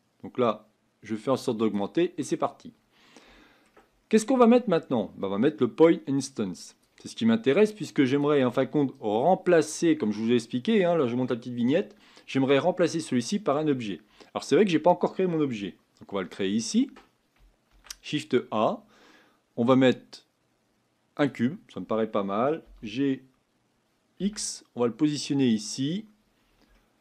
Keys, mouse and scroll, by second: 14.4-15.6 scroll down 3, 15.6-21.2 shift+middle drag, 22.7 g, 26.7 shift+middle click.